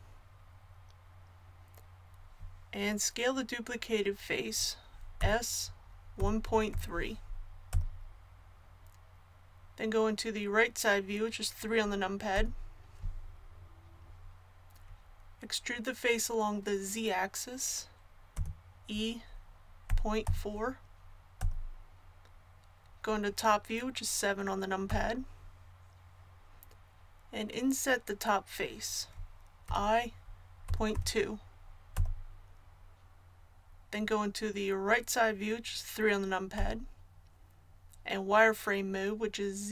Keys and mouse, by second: 5.2 s, 12.3 KP_3, 18.3 e, 24.9 KP_7, 29.7 i, 36.5 KP_3.